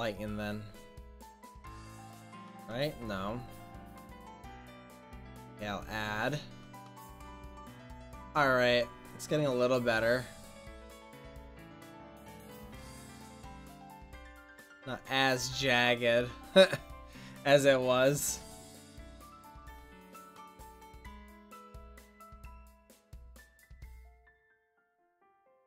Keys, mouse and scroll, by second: 1.5-6.6 drag, 6.6-7.2 middle drag, 7.4-7.8 middle drag, 11.9 click, 11.9-12.9 right drag, 12.9-13.7 middle drag, 16.3-18.5 middle drag, 19.3-20.4 middle drag, 24.6 click, 24.9-25.6 middle drag.